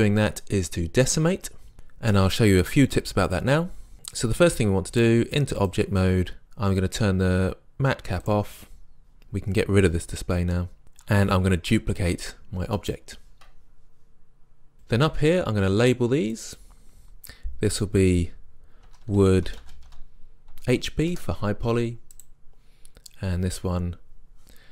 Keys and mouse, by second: 6.3 click, 8.3-10.1 drag, 10.8 n, 12.3 shift+d, 12.9-18.4 drag, 19.2 o, 22.2 click, 24.0 middle click, 24.4-24.7 drag.